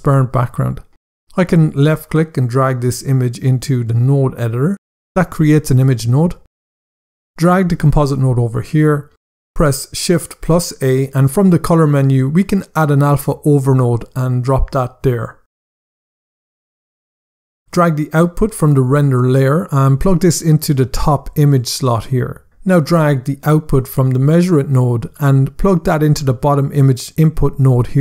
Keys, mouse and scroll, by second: 1.5 click, 7.8 click, 10.2 shift+a, 13.8 click, 15.2 click, 15.9 scroll down 1, 16.8 click.